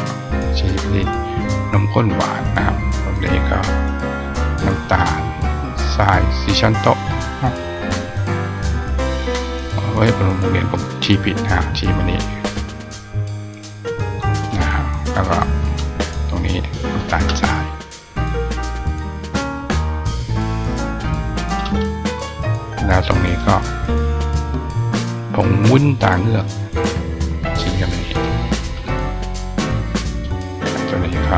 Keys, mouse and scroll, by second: 0.7-1.8 drag, 3.4 click, 4.7 click, 10.6 click, 12.4 click, 13.5 click, 15.5 click, 16.7 click, 18.6-20.2 drag, 20.8 click, 22.7 click, 24.0 click, 25.3 click, 26.4-27.7 drag, 29.9 click.